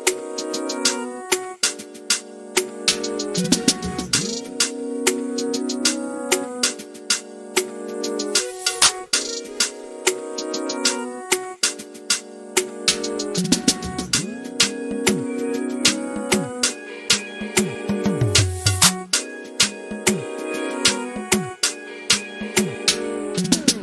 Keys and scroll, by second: 1.6-3.2 typing, 6.7 m, 7.8-12.8 typing, 16.7-17.5 typing, 19.0-19.7 typing, 22.6 m.